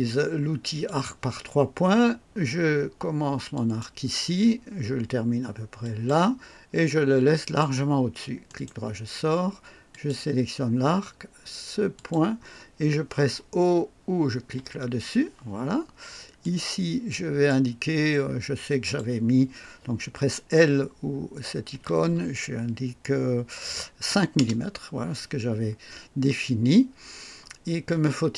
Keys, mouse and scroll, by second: 0.8 click, 3.5 click, 5.8 click, 7.4 click, 8.5 right click, 9.9 click, 11.9 click, 14.5 o, 16.4-17.6 drag, 18.8 click, 21.7 l, 24.0 KP_5, 24.3 KP_Enter.